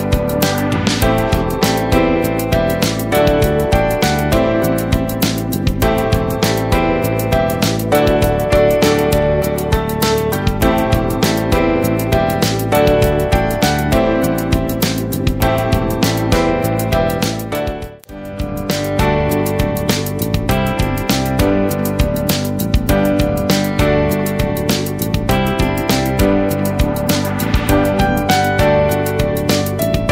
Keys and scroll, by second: 5.1 ctrl+a, 13.9 ctrl+a, 14.8 ctrl+shift+,, 20.1 ctrl+Return, 21.5 ctrl+v, 23.2 ctrl+shift+,, 26.4 alt+Up.